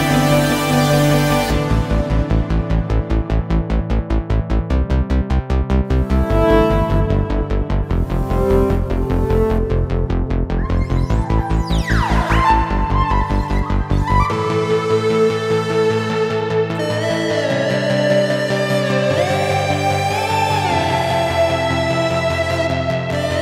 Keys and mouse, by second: 2.6-5.0 ctrl+middle drag, 6.1-9.1 drag, 19.9-23.4 ctrl+middle drag.